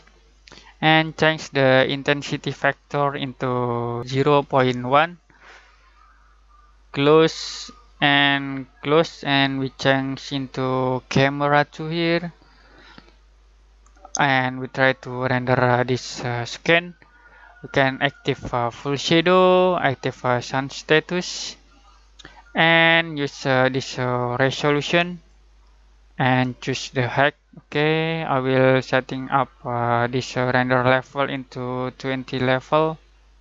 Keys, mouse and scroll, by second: 2.9 click, 17.9 click, 23.0-28.9 drag, 29.1-33.4 drag.